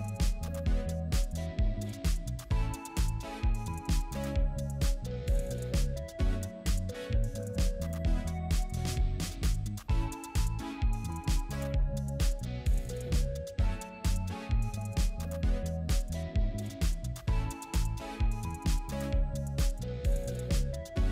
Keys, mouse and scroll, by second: 0.8 scroll down 1, 1.0 scroll up 1, 4.2 scroll up 1, 4.3-5.8 scroll down 1, 11.7 scroll up 1, 12.1 scroll down 1.